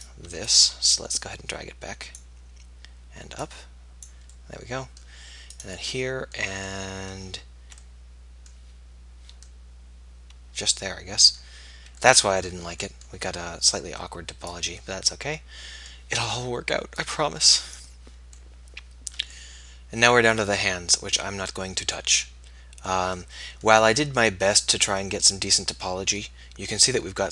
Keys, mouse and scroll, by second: 0.0-1.3 right drag, 1.3-2.3 middle drag, 5.6 middle click, 6.5-7.9 middle drag, 11.2 middle click, 12.2-14.7 middle drag, 14.9 middle click, 19.8 middle click, 22.2-26.5 middle drag.